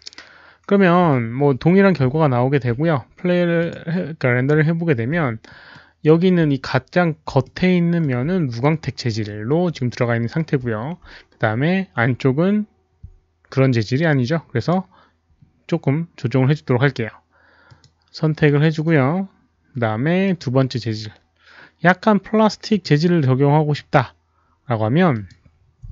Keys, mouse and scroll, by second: 2.0 click, 3.5 click, 5.0 click, 5.8 alt+middle click, 5.8 click, 6.9 click, 7.4 alt+middle click, 9.1 alt+middle click, 9.1 click, 10.5 alt+middle click, 10.5 click, 14.4 click, 14.6 alt+middle click, 16.5 click, 16.5 alt+middle click, 17.8 click, 20.2 click, 22.7 click, 23.9 click, 25.1 click.